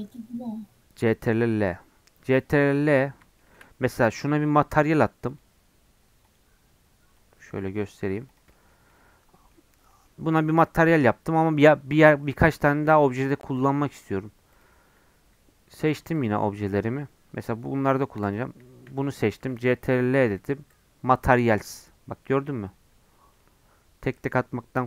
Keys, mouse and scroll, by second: 2.1 middle click, 2.7 click, 3.4-4.8 shift+middle drag, 4.8-8.3 drag, 8.5 middle click, 8.9 scroll down 1, 9.4 middle click, 9.5-9.9 scroll up 6, 9.9 middle click, 10.1-10.6 scroll down 2, 10.4 shift+middle click, 11.1-12.5 middle drag, 12.5 scroll down 1, 12.7-14.5 shift+middle drag, 14.5-19.8 drag, 19.8 ctrl+l, 24.2-24.8 middle drag.